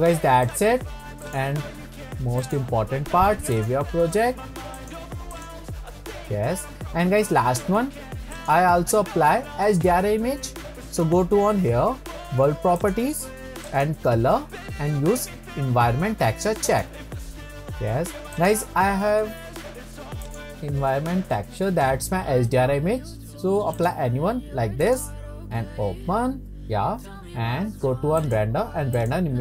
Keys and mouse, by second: 0.6-1.5 drag, 8.4 click, 12.8 click, 13.8-17.0 drag, 18.3 click, 28.3-29.4 drag.